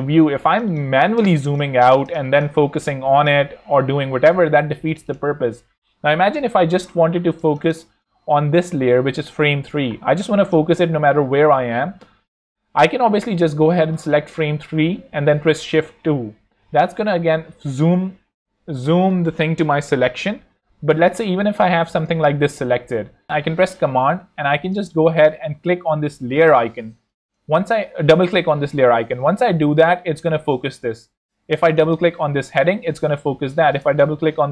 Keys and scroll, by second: 0.4 z, 1.2 space, 1.7 alt+z, 2.1 alt+space, 2.5 z, 4.5 z, 7.2 alt+z, 9.9 z, 15.5 shift+2, 21.8 super+z, 22.8 z.